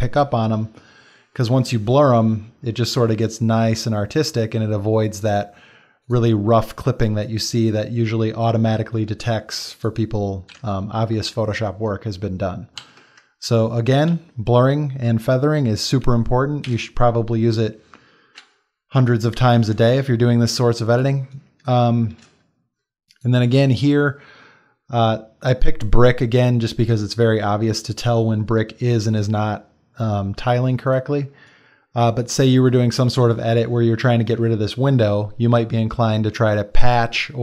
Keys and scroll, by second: 12.8 ctrl+w, 16.7 n, 19.9 space, 30.7 space, 34.4 space.